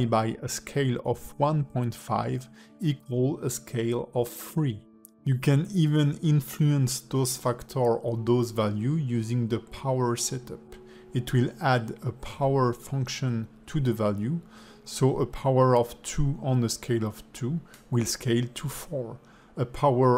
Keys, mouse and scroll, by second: 0.1 click, 6.1 click, 7.2 click, 8.9 click, 9.9 click, 12.0 click, 12.5 s, 14.2 s, 17.3 click, 18.8 click.